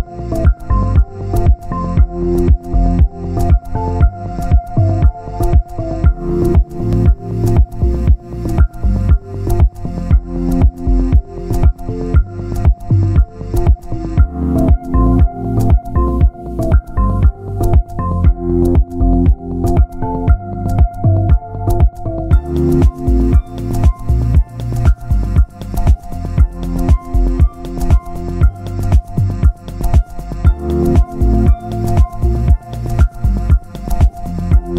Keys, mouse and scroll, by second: 0.3 click, 2.8 alt+a, 3.1 click, 3.7 click, 4.4 alt+a, 4.8 click, 5.4 click, 6.7 ctrl+b, 7.1 alt+a, 7.4 Tab, 7.8 scroll down 1, 8.1 shift+middle click, 8.6 alt+a, 8.8-9.2 scroll up 2, 9.2-11.0 shift+middle drag, 11.0 click, 11.2 Tab, 11.6 middle click, 12.4-12.8 scroll up 2, 12.8 shift+middle click, 13.6 click, 13.8-14.4 scroll up 1, 14.4 click, 15.4 middle click, 16.2 alt+a, 16.9 click, 17.6 click, 19.0-20.7 middle drag, 20.7 alt+a, 20.8 scroll up 2, 21.2 Tab, 21.8 shift+middle click, 22.5 alt+a, 23.2 click, 24.8-25.2 scroll up 2, 25.2 Tab, 25.9-26.9 shift+middle drag, 26.9 click, 29.2 alt+a, 29.9 click, 32.1 alt+a, 32.7 click, 33.4-34.6 middle drag, 34.6 click.